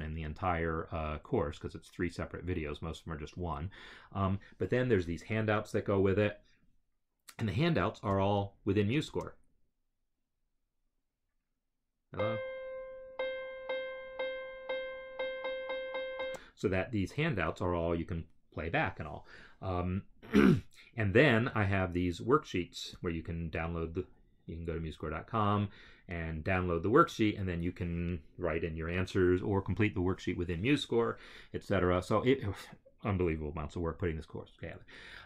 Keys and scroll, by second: 9.0 space, 16.1 space.